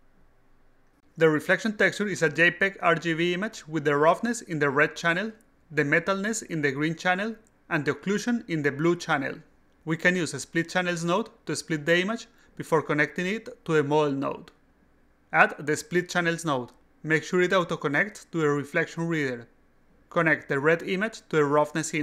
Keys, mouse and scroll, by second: 0.4 click, 17.5 click, 18.3-19.7 drag, 20.8-22.0 drag.